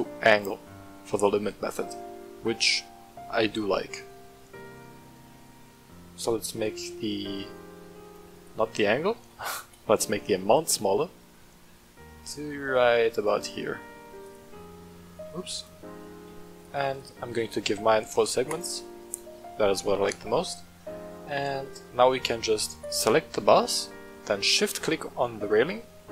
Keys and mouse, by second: 2.7 middle click, 4.0-8.2 shift+drag, 8.3-9.8 drag, 10.5-13.3 shift+drag, 14.2 click, 15.5 click, 16.5 click, 16.7 click, 17.9 w, 19.2-19.5 drag, 19.2-19.5 right drag, 19.8 shift+middle drag, 21.5 click, 22.7 right click, 24.3-25.5 shift+middle drag, 25.7 middle click.